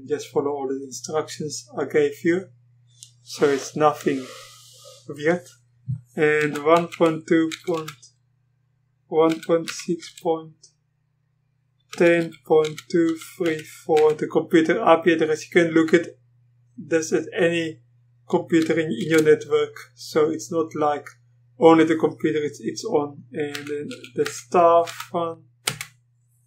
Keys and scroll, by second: 6.4 1, 7.5 typing, 9.1-10.5 typing, 11.7-14.0 typing, 19.0 typing, 23.5 typing, 24.7-25.4 typing, 25.7 Return.